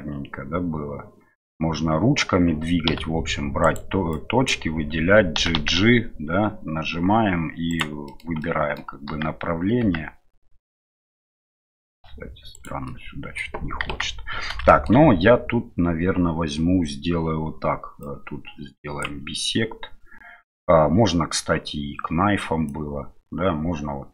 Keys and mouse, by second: 2.9 1, 3.6 right click, 4.2 click, 5.4 g, 8.0 middle click, 8.4 middle click, 9.1 g, 12.8 middle click, 13.8 KP_1, 14.7 middle click, 18.0-19.1 drag, 22.7-24.1 drag.